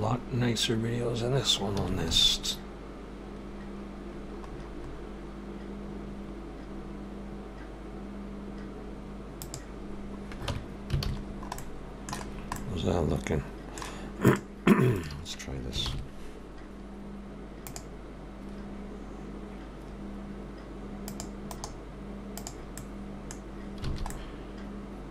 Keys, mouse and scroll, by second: 0.4-1.2 scroll up 4, 1.8 s, 9.9 scroll down 1, 10.5 Tab, 10.5 scroll down 2, 11.0 alt+a, 11.2-11.6 scroll down 2, 11.6 middle click, 12.2 scroll down 1, 12.6 middle click, 14.3 click, 15.0 shift+click, 15.9 ctrl+l, 21.1 click, 21.5 right click, 22.8 middle click, 23.4-23.9 scroll down 2, 23.9 alt+a, 24.1 middle click.